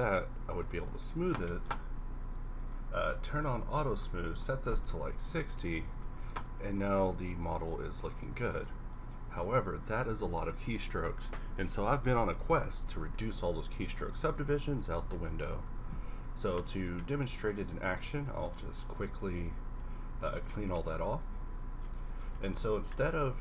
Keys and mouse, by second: 6.9-8.5 middle drag, 12.2-12.9 middle drag, 14.1 x, 15.7 shift+d, 18.4 q.